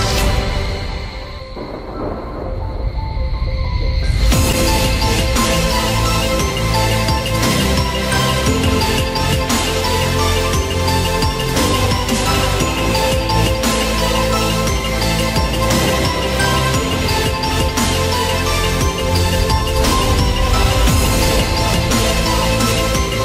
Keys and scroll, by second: 5.4 ctrl+alt+z, 12.3 ctrl+alt+z, 19.3 ctrl+t.